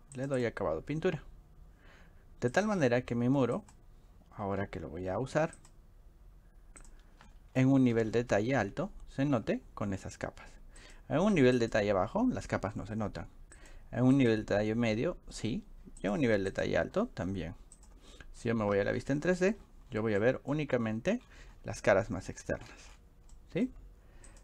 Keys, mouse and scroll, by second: 0.2 click, 0.4 click, 2.6 click, 3.6 click, 5.6 click, 6.8-8.2 scroll up 8, 8.2 middle click, 8.4 middle click, 8.6 middle click, 10.8 click, 16.0 click, 16.5 click, 17.8 click, 18.4 middle click, 19.1 middle click, 19.4 click, 19.6 click, 19.8 middle click, 19.9 middle click, 20.2 shift+middle click, 21.3-21.7 middle drag, 22.5 click, 22.8 click, 23.0 drag, 23.3 middle click, 23.3 scroll, 23.5 scroll up 1, 24.3 click.